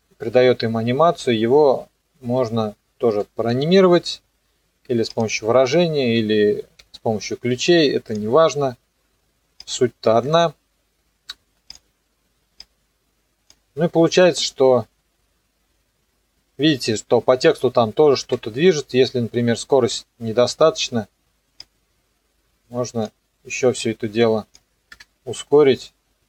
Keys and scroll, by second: 3.5 u, 10.2 KP_0, 14.1 KP_0, 18.2 KP_0, 19.9 Escape, 24.9 KP_0.